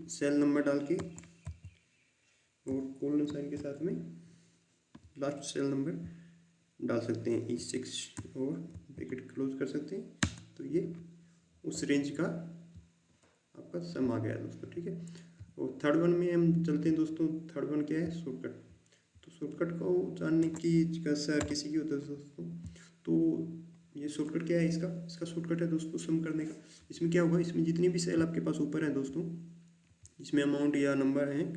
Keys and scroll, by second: 0.9 BackSpace, 1.4 4, 10.1 Return, 21.3 Delete.